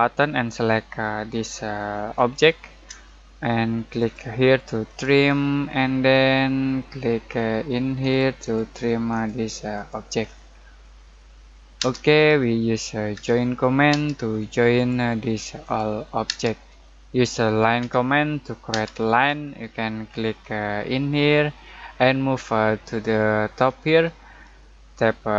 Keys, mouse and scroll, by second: 2.1 shift+click, 5.3-6.1 scroll down 1, 6.1 middle click, 6.6 scroll down 1, 6.8 middle click, 7.2-8.1 scroll up 1, 8.1 click, 8.7-9.1 scroll up 1, 9.1 click, 10.2-10.8 scroll down 1, 10.8 middle click, 11.8 space, 13.1 j, 13.9 space, 14.7 click, 16.2 space, 17.8 l, 18.7 space, 19.2 middle click, 19.6-21.0 scroll up 1.